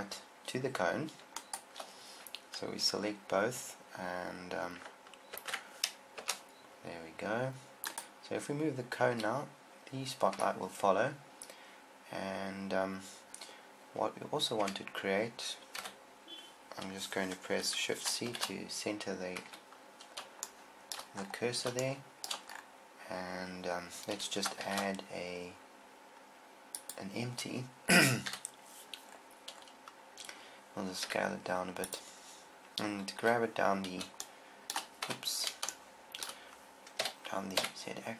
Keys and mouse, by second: 5.7 ctrl+p, 9.6 click, 9.6 g, 15.0 KP_7, 16.3 KP_1, 18.7 shift+c, 19.9 KP_7, 25.0 shift+a, 27.3 shift+a, 28.7 KP_1, 28.7 KP_1, 31.5 s, 33.7 g, 37.4 g.